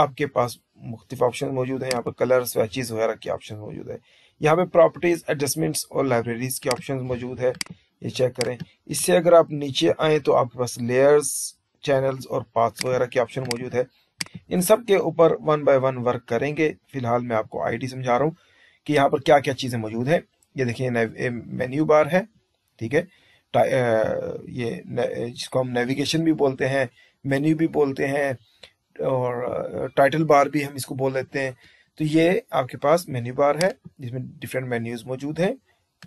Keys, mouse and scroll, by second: 1.8 click, 6.5 click, 7.4 click, 8.3 click, 15.9-16.9 drag.